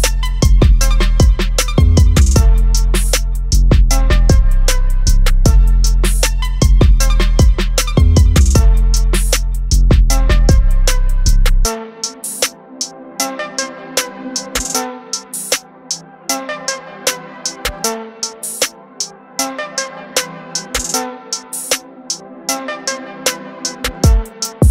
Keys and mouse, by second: 1.0 click, 5.2 click, 10.5 click, 15.0 click, 21.2 click, 21.2 click.